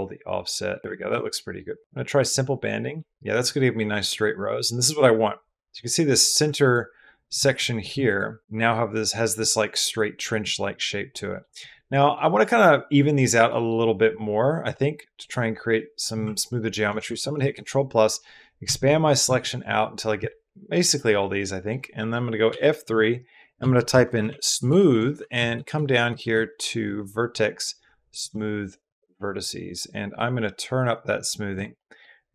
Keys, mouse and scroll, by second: 1.0 middle click, 2.0 click, 6.5 alt+click, 7.4 3, 10.4 middle click, 11.7 click, 13.1 click, 14.4 1, 14.9 click, 15.6 click, 16.7 ctrl+KP_Add, 16.9 ctrl+KP_Add, 17.0 ctrl+KP_Add, 17.2 ctrl+KP_Add, 18.4 ctrl+KP_Add, 18.7 ctrl+KP_Add, 19.1 ctrl+KP_Add, 20.8 middle click, 21.8 middle click, 22.3 F3, 24.1 o, 25.1 Down, 25.3 Down, 26.1 Down, 30.1-31.6 drag, 31.6 middle click.